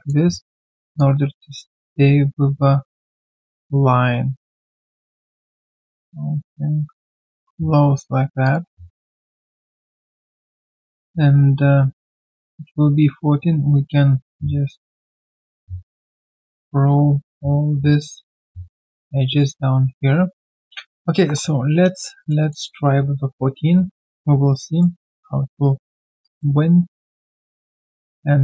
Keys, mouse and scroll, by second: 0.2 typing, 8.9 middle click, 22.3 alt+middle click, 24.2 q, 24.5 right click, 25.1 scroll down 2, 26.0 alt+scroll, 26.2 alt+right click.